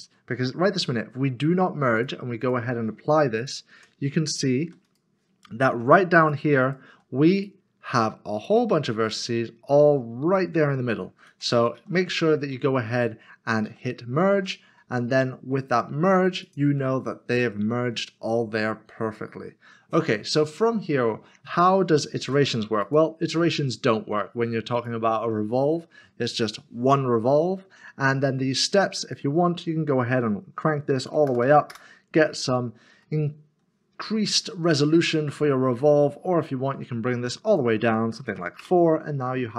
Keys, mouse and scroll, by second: 1.9 click, 3.3 double click, 3.4 click, 4.6 typing, 4.8 click, 6.2 click, 6.6 double click, 6.9 g, 7.3 click, 9.0 g, 12.6 ctrl+z, 14.3 ctrl+z, 16.4 click, 18.6 middle click, 19.4-19.9 scroll down 1, 20.3 middle click, 22.8 middle click, 27.3 click, 29.0 click, 31.3 typing, 31.7 Return, 33.0 middle click, 36.5-37.5 scroll down 1, 37.5 click, 38.6 Return.